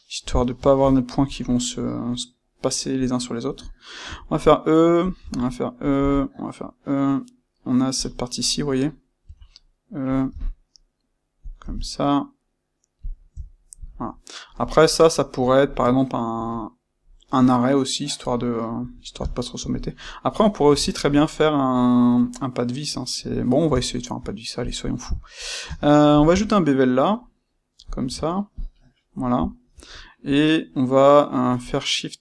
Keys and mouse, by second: 0.3 click, 0.6-5.1 ctrl+shift+middle drag, 4.0 e, 5.1 click, 5.2 e, 5.9 click, 9.2 e, 10.1 click, 10.3 e, 11.4 click, 11.5 e, 13.0 click, 13.4-24.5 shift+middle drag, 24.5 click, 25.6 space, 29.9-32.2 middle drag.